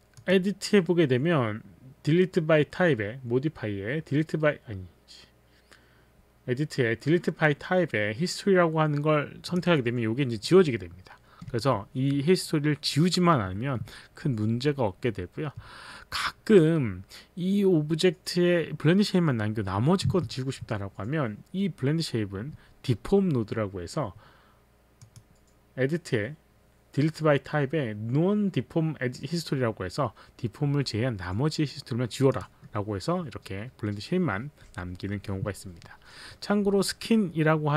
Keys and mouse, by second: 0.2 click, 9.5 click, 11.5 z, 25.0 click, 32.4 click.